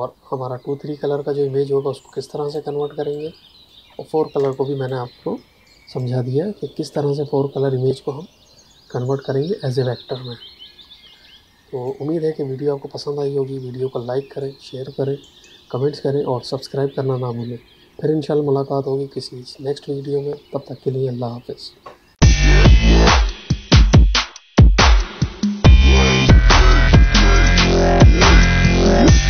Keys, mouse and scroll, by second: 2.4 click, 4.3 space, 4.4 click, 4.8 space, 5.9 ctrl+click, 11.7 click.